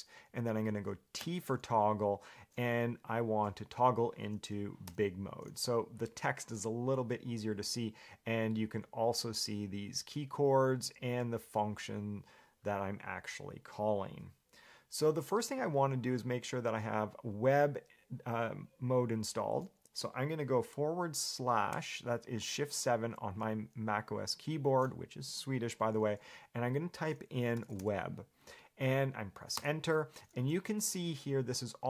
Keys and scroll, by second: 5.1 g, 21.9 /, 27.5-28.5 typing, 29.8 Return, 30.7 shift+v.